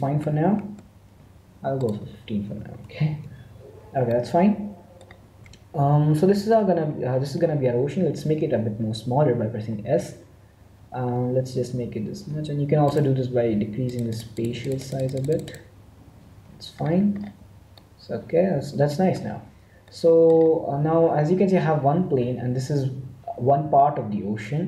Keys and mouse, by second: 1.9-3.6 drag, 4.1-9.7 middle drag, 9.7 s, 13.8-16.7 drag, 16.7-24.6 middle drag.